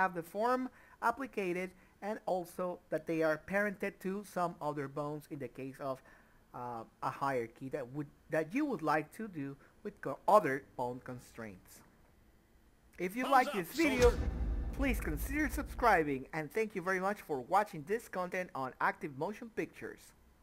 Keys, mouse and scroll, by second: 0.9 middle click, 2.7 ctrl+z, 6.3 ctrl+p, 11.3 click, 11.4 middle click.